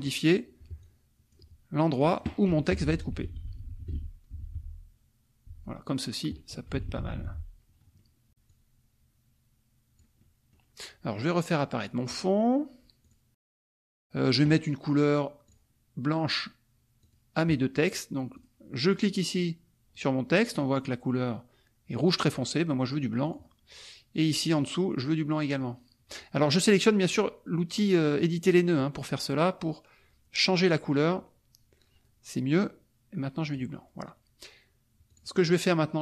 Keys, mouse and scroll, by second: 0.8 ctrl+click, 2.0 click, 2.7 Down, 5.5 shift+Down, 6.6 shift+Up, 8.0 middle click, 8.5-10.2 drag, 10.2 middle click, 12.1-13.3 drag, 13.6 middle click, 15.4 click, 17.0 click, 18.3 click, 18.9 click, 23.2 click, 24.5 click, 33.4 click, 35.1 click.